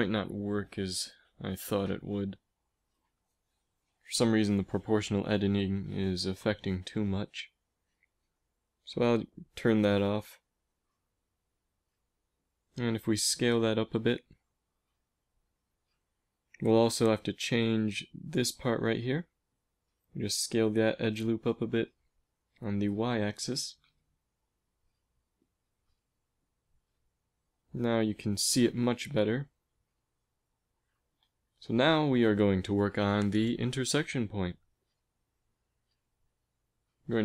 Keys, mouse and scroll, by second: 7.6 o, 8.0 o, 9.9 o, 11.2 s, 16.6 a, 19.6 s, 24.8 middle click, 25.2 Tab, 25.5 a, 25.6 middle click, 26.0 z, 31.3-33.0 drag, 33.0 Tab, 34.0-36.8 typing.